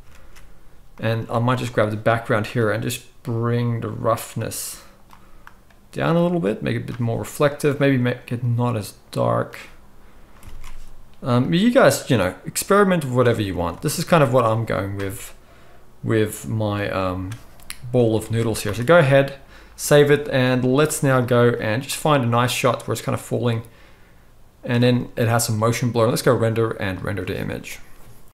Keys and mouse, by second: 0.2 ctrl+s, 1.2 z, 2.5 click, 2.6-4.3 middle drag, 4.3-7.8 drag, 7.8-11.4 middle drag, 10.5 alt+a, 11.4 click, 11.5-16.3 middle drag, 13.6 ctrl+s, 13.7 ctrl+s, 16.3-28.3 drag, 18.2 ctrl+s, 18.4 ctrl+s, 19.0 z.